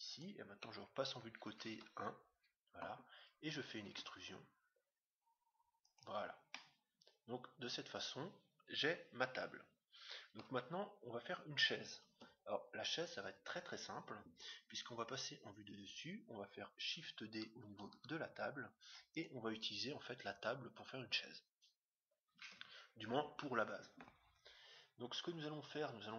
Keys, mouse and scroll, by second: 1.0 right click, 1.6 KP_1, 4.0 e, 6.4-8.2 middle drag, 12.1 Tab, 14.8 KP_7, 17.7 shift+d, 22.4 KP_1.